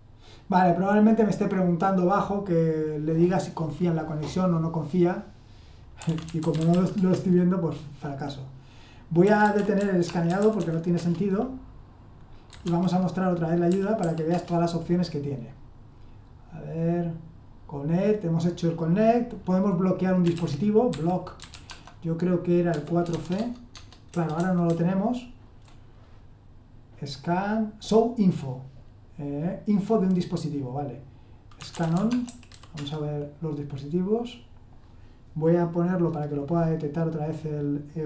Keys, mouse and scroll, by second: 5.7-7.2 typing, 9.0-10.9 typing, 10.9 Return, 12.3-14.0 typing, 14.3 Return, 20.2-21.6 typing, 22.7-25.6 typing, 23.4 Tab, 23.7 Tab, 31.3-33.0 typing.